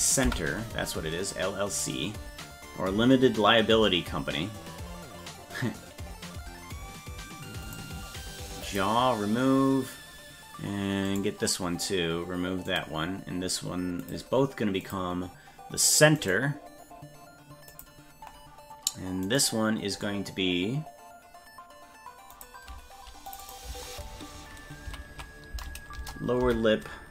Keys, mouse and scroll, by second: 7.7 click, 8.7 click, 11.1 right click, 12.7 click, 14.0 click, 14.8 click, 16.2 right click, 17.7 click, 19.3 right click, 22.3 click, 23.3 click, 23.4-27.1 drag.